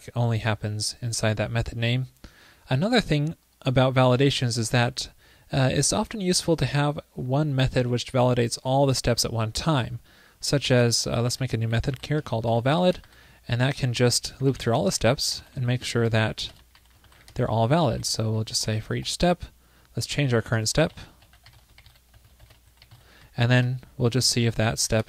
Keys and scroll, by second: 16.0 alt+BackSpace.